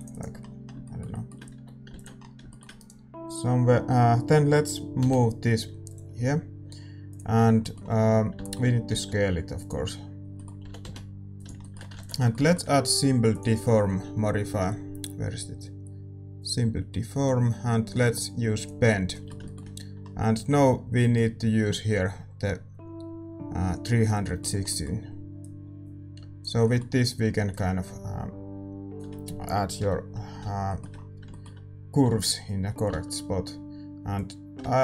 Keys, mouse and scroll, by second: 0.8-5.8 middle drag, 1.5 a, 2.1 ctrl+s, 2.7-5.8 right drag, 5.8 m, 7.0-8.9 drag, 7.3-16.4 middle drag, 8.9 s, 10.6 g, 12.2 ctrl+s, 16.9-22.7 middle drag, 18.5-24.2 drag, 24.2-29.7 middle drag, 25.3-29.7 drag, 29.7 KP_7, 30.6-34.1 middle drag, 32.8 Tab, 34.1-34.8 drag.